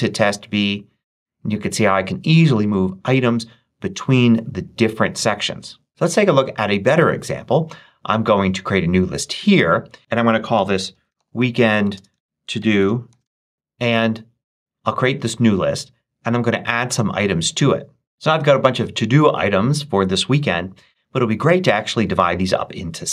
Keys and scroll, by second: 10.2-13.6 typing.